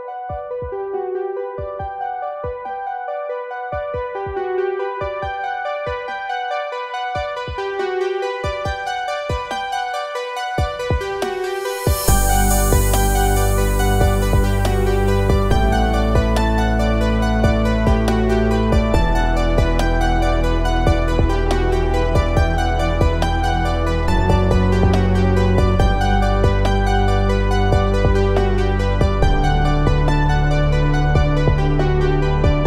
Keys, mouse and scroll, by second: 1.4 space, 1.5 click, 1.9 space, 2.2 click, 3.5-5.8 drag, 9.5 ctrl+c, 10.3 ctrl+f, 13.4 click, 14.4-17.5 middle drag, 17.5 middle click, 17.5 click, 21.4-24.0 drag.